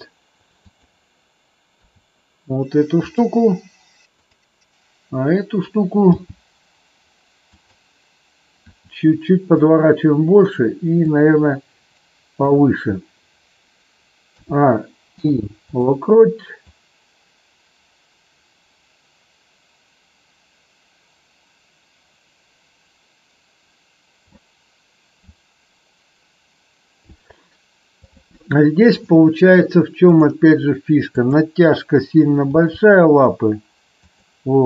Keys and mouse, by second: 0.5 click, 1.7 r, 3.1 click, 4.2 click, 6.1 g, 7.5 click, 8.7 r, 11.1-12.4 drag, 14.3 a, 15.1 i, 16.7-24.4 drag, 25.3 click, 30.1 click, 31.2 click, 32.4 g, 33.9 click.